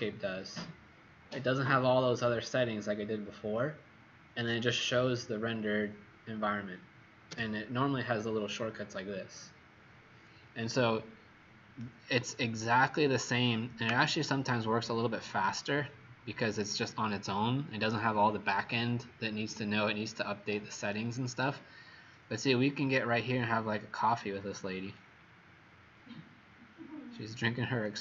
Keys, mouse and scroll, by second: 7.3 h, 11.8 right click, 21.7-22.6 scroll up 5, 22.8 right click, 24.8-25.9 scroll up 4, 25.9 scroll up 1, 26.0-26.4 scroll down 1, 26.9 scroll down 1, 27.8 click.